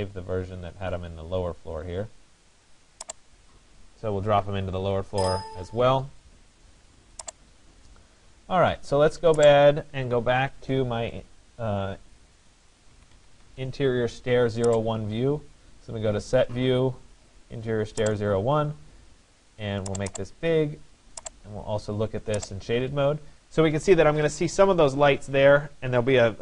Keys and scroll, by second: 4.2 F1, 4.8 Escape, 12.5 Escape, 24.1 Escape.